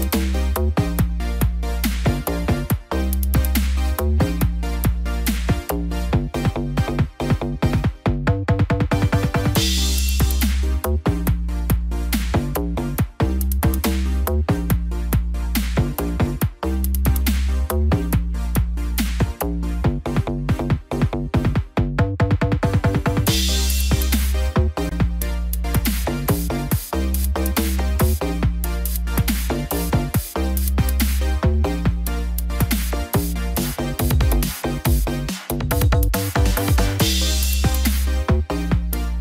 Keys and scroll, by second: 5.7 ctrl+z, 6.1 ctrl+=, 14.2 ctrl+-, 14.8 ctrl+0.